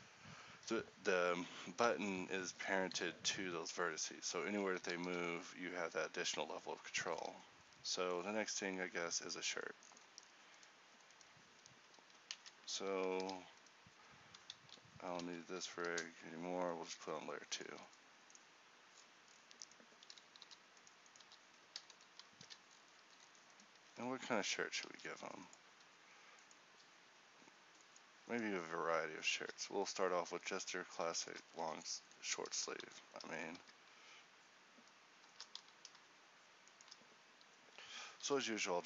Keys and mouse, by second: 3.0 g, 5.1 r, 7.3 a, 10.6-12.5 right drag, 12.5 ctrl+t, 13.3 a, 15.3 m, 17.0 a, 17.7-18.8 middle drag, 17.8 a, 20.5 h, 21.3 h, 22.5 a, 24.0 Tab, 24.9 ctrl+t, 29.7 z, 30.5 z, 31.6 z, 35.7 z, 38.3 h.